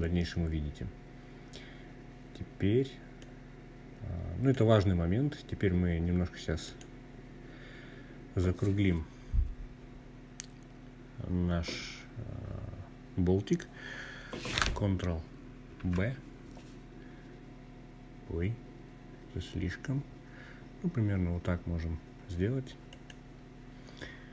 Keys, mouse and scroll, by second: 1.9-3.3 drag, 5.3 click, 6.3-8.3 scroll up 4, 14.5 ctrl+b, 21.6 click, 23.5 scroll down 1.